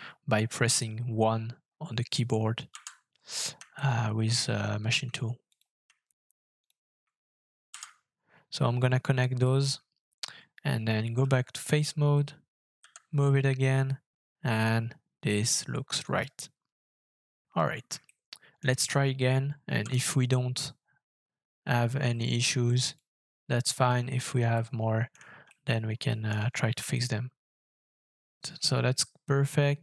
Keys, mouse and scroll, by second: 2.7 &, 3.7 shift+middle click, 6.6 shift+click, 9.7 scroll down 2, 10.3-11.2 Tab, 12.8 g, 16.0 right click, 16.7-17.6 Tab, 18.0 shift+middle click, 19.7 f, 24.5 middle click, 25.5 shift+middle click, 26.6 shift+scroll down 1, 26.9 shift+middle click.